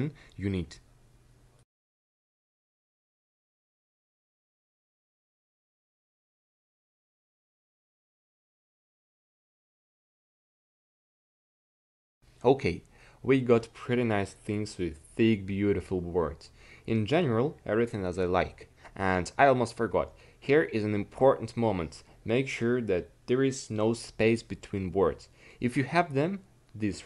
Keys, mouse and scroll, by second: 0.6 a, 0.8 c, 1.3-2.4 drag, 2.2 a, 2.3 c, 2.7 a, 2.8 c, 3.5-4.6 drag, 4.6 c, 4.9 a, 5.1 c, 5.5 click, 6.4 a, 6.5 c, 7.9 a, 8.0 c, 10.1 click, 10.3 a, 10.4 c, 11.9 a, 12.0 c, 12.8-14.3 drag.